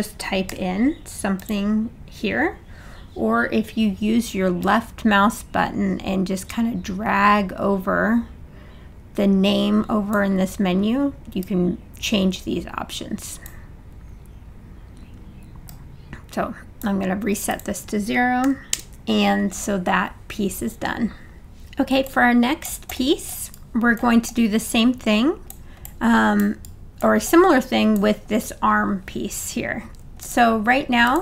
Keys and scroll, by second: 0.5 2, 18.4 0, 18.8 Return.